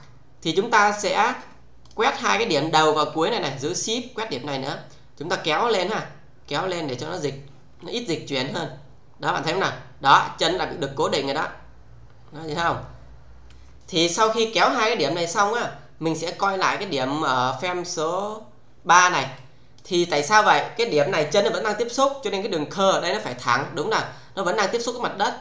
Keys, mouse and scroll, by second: 3.3-3.9 shift+click, 5.4-7.2 shift+middle click, 8.3-13.5 click, 17.7 click, 19.4-19.9 click, 25.2-25.4 click.